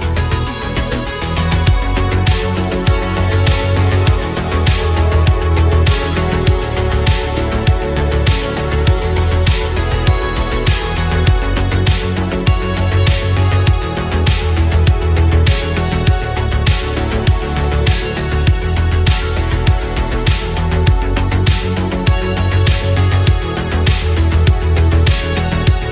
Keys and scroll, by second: 15.5 ctrl+z, 17.4 ctrl+z, 21.4 ctrl+z.